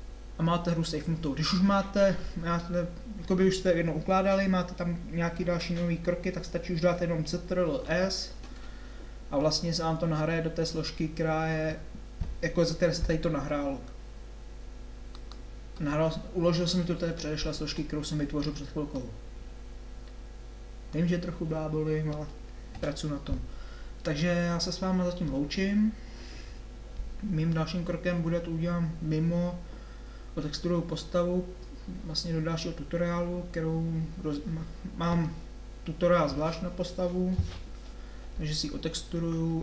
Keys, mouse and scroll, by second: 8.0 ctrl+s, 22.8 KP_7.